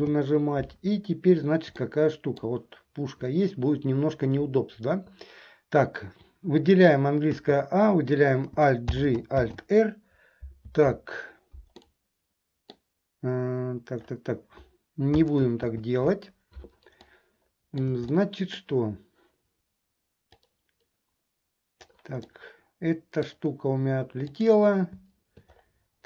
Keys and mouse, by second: 1.9 shift+middle click, 7.5 a, 9.1 alt+g, 12.0 middle click, 15.7 ctrl+z, 17.2 middle click, 18.3 shift+middle click, 20.5-22.0 right drag, 22.5 middle click, 24.4 click.